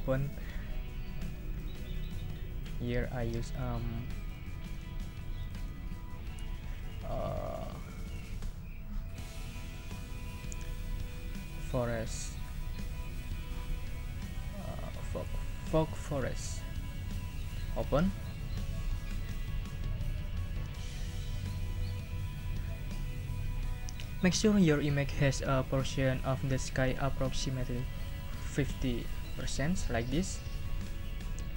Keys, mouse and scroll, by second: 0.0 click, 1.6 click, 2.0 click, 3.5 click, 4.2 click, 5.4 click, 7.3 scroll down 2, 8.0 scroll down 2, 10.1 scroll down 2, 11.1 scroll down 2, 13.8 scroll down 2, 16.1 click, 17.1 click.